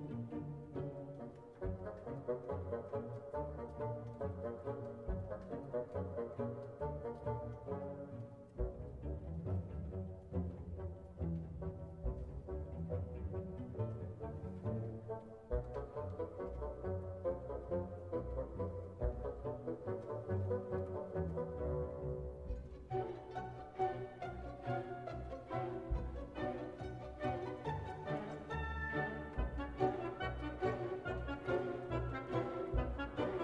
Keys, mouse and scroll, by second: 4.0-5.0 drag, 6.6 click, 8.7 click, 10.3-11.4 drag, 18.4 click, 19.5 click, 21.6-22.3 scroll down 2, 22.8 click, 24.2-25.2 drag, 27.4 click, 28.6-30.7 drag, 32.2 click.